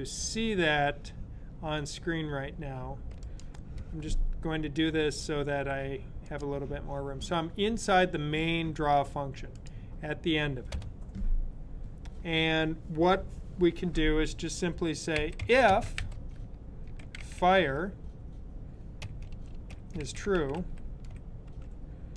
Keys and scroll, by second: 15.1-17.9 typing, 19.1-21.2 typing.